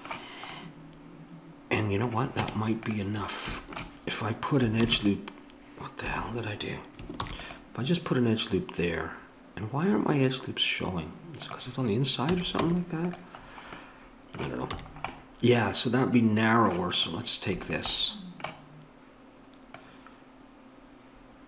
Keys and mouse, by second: 2.4 Tab, 3.0 Tab, 3.3-4.9 middle drag, 4.9 ctrl+e, 7.2 ctrl+r, 12.3 a, 12.7 Tab, 14.8 a, 17.0-21.4 drag.